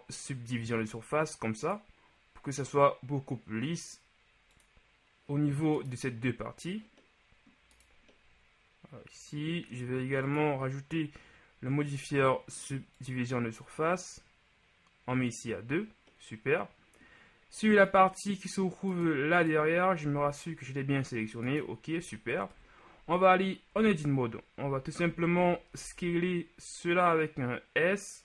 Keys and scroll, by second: 20.3 g, 22.7 KP_1, 23.8 Tab, 24.7 a, 25.1 a, 25.4 a, 25.9 s.